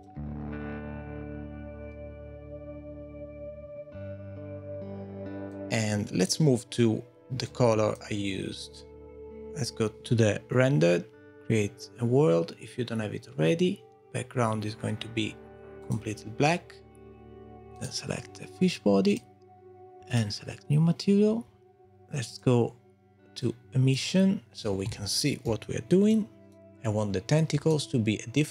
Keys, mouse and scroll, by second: 5.5 click, 7.5 click, 11.3 click, 15.8 click, 17.7 click, 19.1 click, 20.3 click.